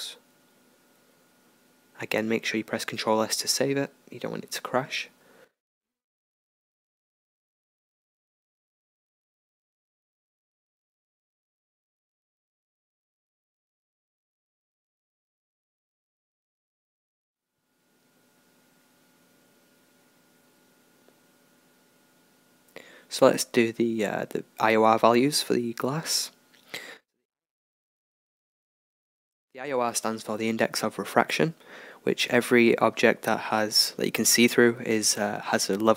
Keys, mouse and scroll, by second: 1.9-3.7 middle drag, 3.7 r, 10.3-12.8 middle drag, 12.8-15.1 right drag, 13.2-14.6 drag, 14.6 middle click, 15.7-17.9 middle drag, 18.1-20.8 middle drag, 20.9-22.6 middle drag, 22.6-25.0 right drag, 25.0-27.1 middle drag, 27.1-30.5 drag, 32.8 middle click.